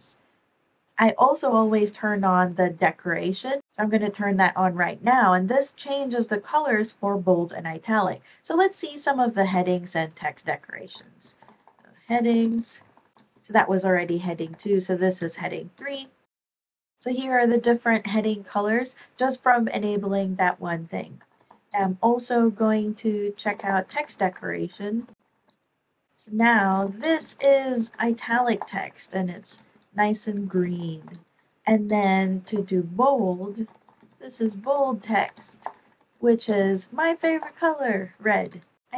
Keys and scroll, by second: 9.4 Escape, 10.7-13.0 typing, 14.7-17.0 typing, 21.1-21.6 typing, 23.2-31.4 typing, 31.8 Return, 32.4 super+b, 33.3-37.9 typing, 38.3 Return, 38.4 Return.